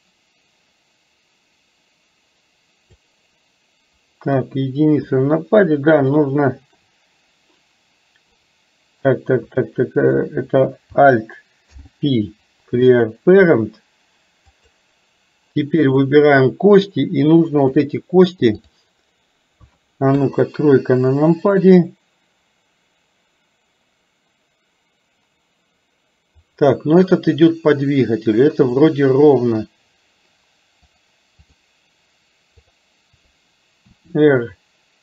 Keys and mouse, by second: 4.4 KP_1, 6.3 shift+middle click, 11.7 alt+p, 14.6 click, 16.0 click, 17.7-18.9 drag, 20.2 KP_3, 30.9 click, 32.7 click, 34.0 r.